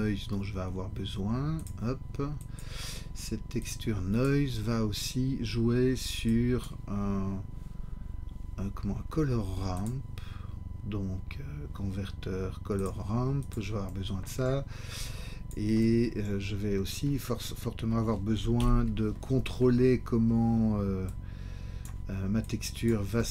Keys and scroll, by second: 18.6 ctrl+t.